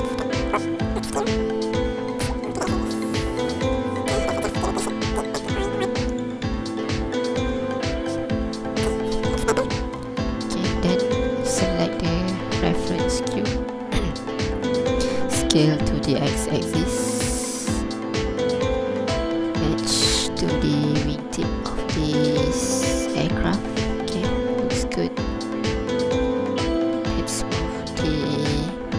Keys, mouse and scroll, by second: 0.2 ctrl+click, 0.8 ctrl+z, 1.1-1.9 scroll up 2, 2.1 g, 2.4 x, 3.7 click, 4.2 n, 4.6 click, 8.1 n, 8.3 scroll up 1, 8.5-8.9 scroll down 2, 8.9 ctrl+click, 9.9 alt+a, 10.0 ctrl+n, 10.0 ctrl+click, 11.4 right click, 13.0 ctrl+click, 13.6 scroll down 1, 14.4 ctrl+click, 14.9 scroll up 1, 15.4 s, 15.7 x, 24.0 click, 24.0 scroll down 2, 24.3 ctrl+click, 24.7 scroll up 2, 25.4 ctrl+click, 26.3 scroll down 2, 26.7 right click, 27.8 scroll up 1.